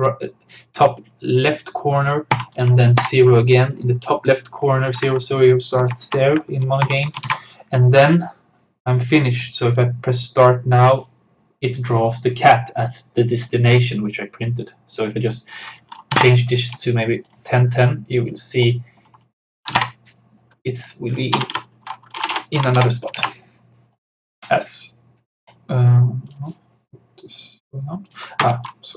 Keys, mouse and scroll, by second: 2.4-3.5 typing, 5.8 Right, 6.9 shift+;, 7.3 ctrl+s, 9.7 click, 15.0 click, 15.9-16.8 typing, 17.3 click, 19.5-20.3 typing, 20.8 click, 21.4-23.3 typing, 24.4 click.